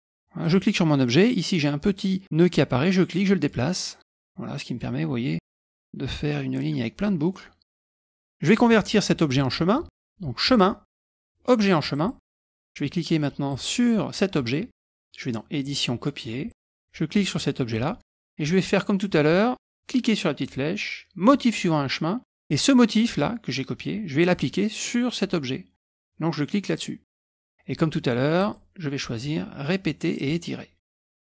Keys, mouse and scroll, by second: 0.0 click, 0.4 click, 2.9 click, 3.9-5.0 drag, 7.3 middle click, 7.3-7.6 scroll down 2, 7.8 middle click, 8.1-8.4 scroll down 1, 10.4 click, 11.9 click, 13.5 click, 15.6 click, 16.5 click, 17.2 click, 20.4 click, 21.2 click, 22.5 click, 24.3 click, 26.7 click, 28.4 click, 30.1 click.